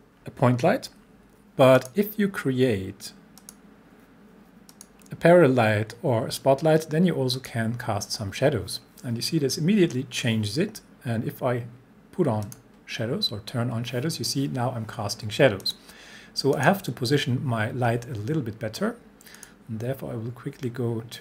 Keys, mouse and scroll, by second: 1.7 click, 2.5 click, 7.3 click, 12.4 click, 15.6 click, 19.4 click.